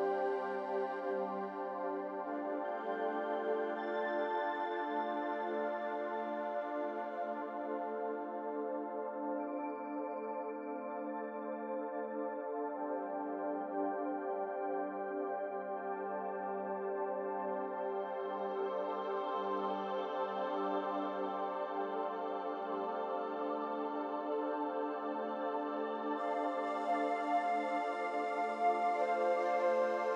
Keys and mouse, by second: 0.9 click, 5.2 click, 6.2 h, 7.5-8.6 middle drag, 9.9 ctrl+z, 13.6 ctrl+z, 16.7-17.8 middle drag, 19.2-22.0 ctrl+z, 23.3 ctrl+z, 23.6-25.0 ctrl+z.